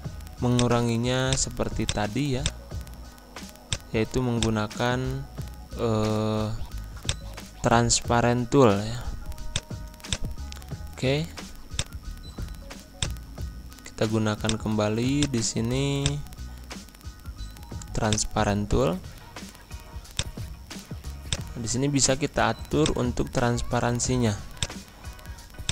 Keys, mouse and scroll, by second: 8.2 ctrl+Home, 9.4-14.4 drag, 15.9 shift+click, 17.1 ctrl+g, 18.0 click.